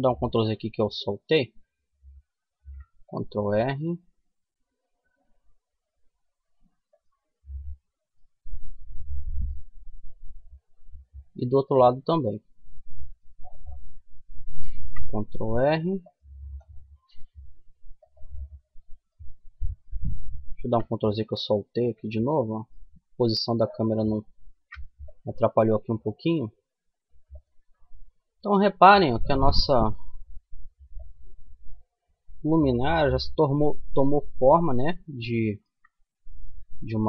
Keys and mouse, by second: 1.5 ctrl+r, 6.7-9.9 middle drag, 13.9 ctrl+r, 13.9 middle click, 17.6 middle click, 19.8 ctrl+z, 23.2 middle click, 23.7 ctrl+r, 27.9 ctrl+r, 34.3-36.6 middle drag, 36.6 ctrl+r.